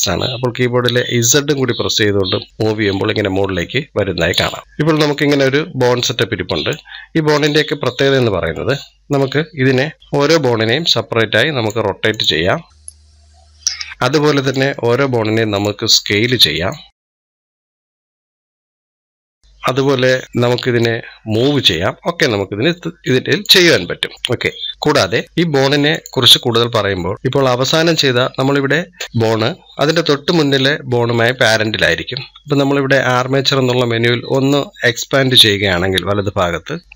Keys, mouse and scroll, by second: 4.6-7.2 middle drag, 7.2 click, 8.0 scroll down 1, 8.4-10.0 middle drag, 10.0 click, 12.8 click, 15.4 click, 16.2-17.4 middle drag, 17.4 click, 18.9-20.2 middle drag, 20.2-23.6 drag, 23.6 middle click, 24.1 click, 24.4 scroll up 1, 24.7-25.7 middle drag, 25.7 click, 26.6-34.1 middle drag, 34.1-36.9 drag.